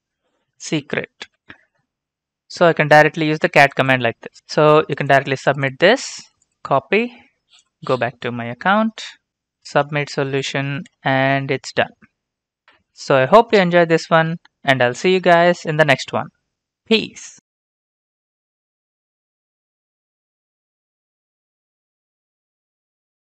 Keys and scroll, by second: 6.1 ctrl+c, 10.3 ctrl+v, 10.9 Return.